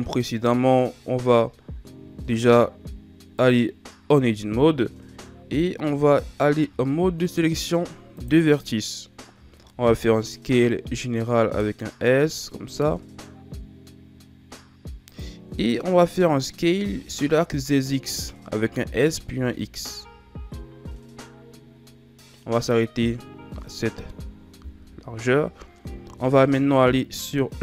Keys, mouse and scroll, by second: 1.9 s, 4.0 Tab, 6.6 ctrl+Tab, 9.0-9.9 scroll down 4, 9.9 s, 16.1-17.2 shift+scroll down 2, 17.2-18.0 shift+scroll up 5, 18.6 s, 23.0-23.5 scroll down 2, 23.5-26.0 middle drag, 26.0 KP_3.